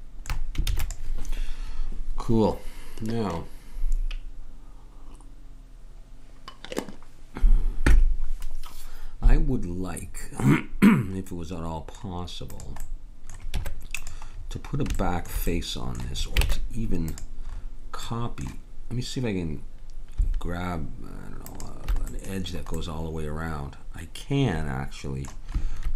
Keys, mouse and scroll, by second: 0.7 ctrl+s, 11.3-12.5 middle drag, 12.5-13.6 drag, 13.6 Tab, 14.5 middle click, 16.5 ctrl+Tab, 17.5 middle click, 18.1 scroll down 1, 18.2 middle click, 21.5 click, 22.1-23.2 middle drag.